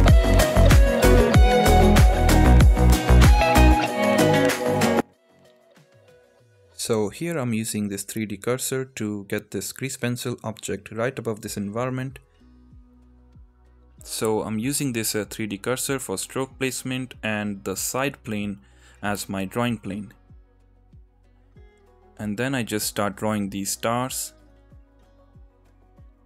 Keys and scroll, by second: 0.4 ctrl+z, 0.6 ctrl+z, 0.9 ctrl+z, 2.4 Tab, 3.1 x, 3.3 Tab, 3.9 ctrl+z, 4.5 ctrl+z, 5.1 ctrl+z, 5.3 ctrl+z, 5.6 ctrl+z, 7.4 ctrl+z, 7.7 ctrl+z, 25.1 ctrl+z.